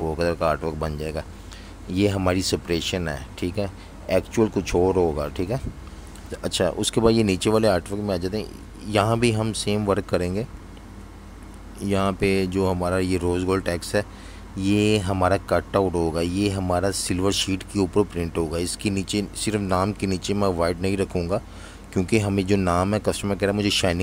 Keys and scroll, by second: 0.0-1.1 typing, 2.9 z, 4.9 v, 5.1 space, 15.0 super+z.